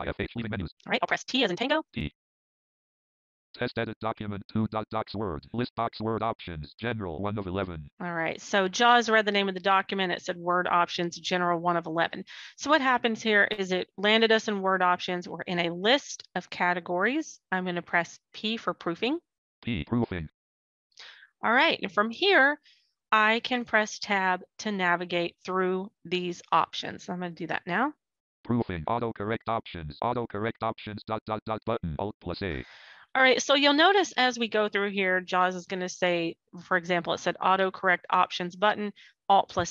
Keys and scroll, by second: 1.2 t, 17.5 p, 25.4 Tab.